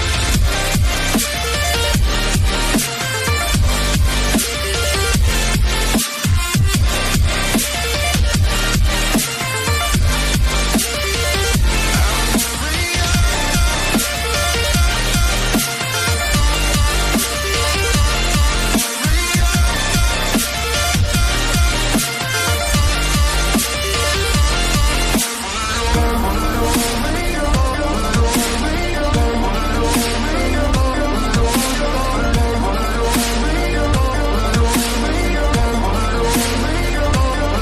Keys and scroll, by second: 12.7 ctrl+j, 21.0 ctrl+j.